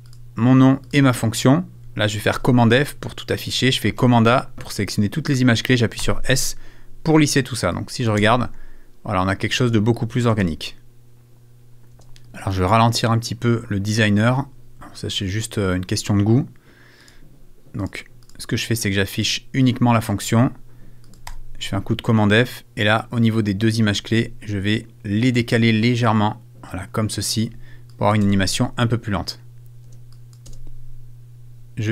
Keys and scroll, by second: 12.6 space, 28.2 shift+space, 29.8 space.